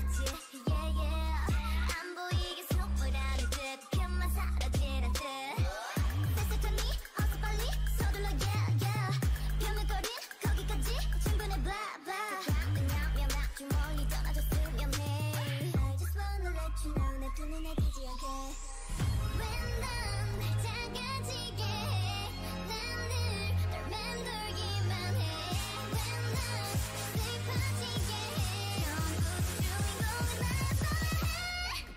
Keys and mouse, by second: 0.9 o, 1.5 g, 3.3 middle click, 4.6 click, 5.5 g, 6.8 g, 11.5 click, 11.9 middle click, 12.2 g, 13.3 g, 13.8-15.1 drag, 14.3 g, 15.1 middle click, 16.2 g, 17.3 g, 18.3 g, 19.1 g, 21.0-24.5 drag, 21.3 g, 21.9 g, 23.0 g, 24.5 g, 25.8 p, 26.8 o, 27.4 s, 29.1 right click, 29.4 s, 29.8 click, 30.4 Tab, 30.7-31.9 middle drag.